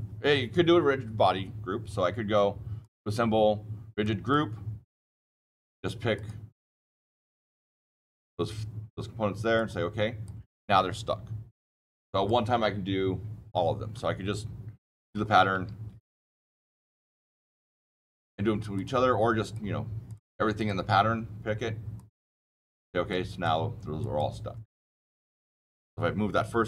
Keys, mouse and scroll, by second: 2.7 click, 3.9 click, 4.9 click, 5.3 click, 6.1 click, 7.1 click, 7.7 click, 9.5 click, 10.2 click, 11.8 click, 15.1 ctrl+z, 15.6 ctrl+z, 17.2 click, 17.5 click, 18.7 click, 19.4 click, 20.0 click, 20.5 click, 21.9 click, 23.0 click, 23.9 click.